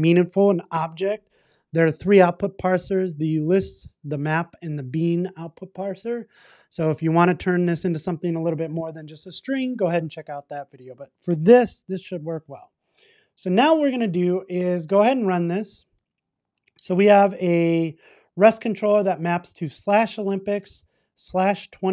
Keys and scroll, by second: 12.0 super+s, 15.3 ctrl+r.